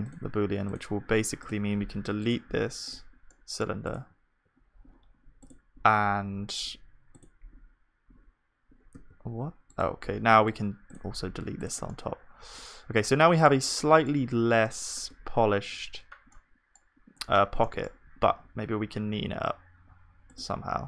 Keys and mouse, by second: 3.3-15.2 drag, 3.3-9.0 middle drag, 3.3-9.0 right drag, 9.0 g, 11.9 middle click, 11.9 right click, 13.4-15.2 right drag, 15.2 Tab, 18.3 ctrl+r.